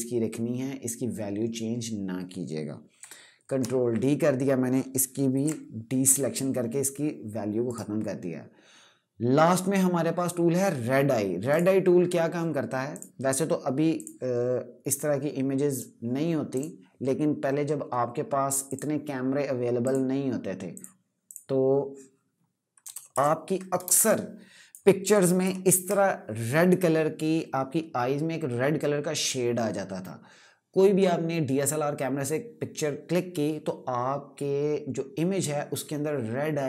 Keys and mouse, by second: 2.7 ctrl+Num_Lock, 3.2 ctrl+d, 5.0 d, 7.4 right click, 11.2 click, 22.6 KP_Add, 23.5 space, 23.8 click, 24.0 space, 25.1 ctrl+KP_Subtract.